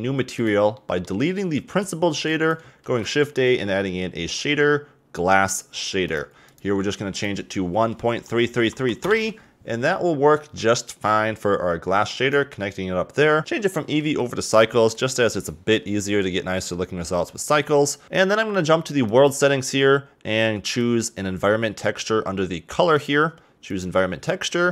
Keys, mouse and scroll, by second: 0.3 click, 0.7 middle click, 1.7 x, 2.3 click, 2.8 shift+a, 7.1-8.6 drag, 8.6 3, 8.7 3, 10.9 click, 13.4-14.5 drag, 18.0 click, 20.8-24.7 drag.